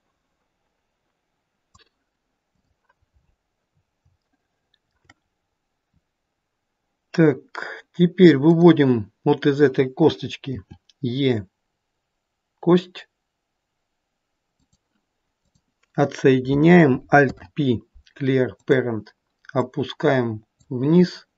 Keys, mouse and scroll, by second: 3.4-3.8 scroll up 3, 3.9-4.2 scroll down 3, 4.5 shift+middle click, 5.4-6.4 scroll up 1, 10.7 e, 15.5 click, 17.4 alt+p, 19.7 click.